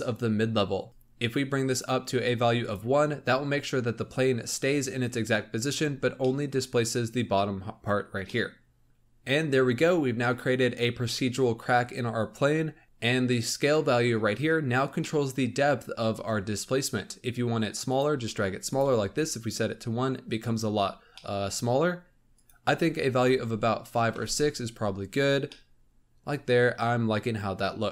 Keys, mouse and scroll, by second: 0.9 click, 1.6-2.6 drag, 5.7-6.1 scroll up 2, 6.3-8.6 middle drag, 14.9-17.8 middle drag, 17.8 click, 21.1-22.3 middle drag, 22.3-24.3 drag, 25.3 scroll down 2, 25.5-27.9 middle drag.